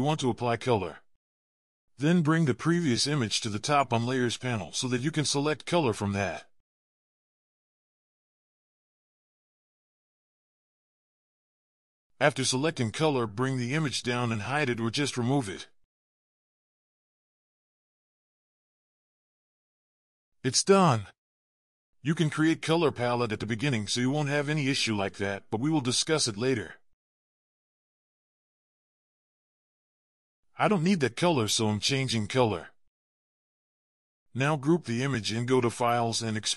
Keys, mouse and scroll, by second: 1.3 ctrl+z, 35.5 double click.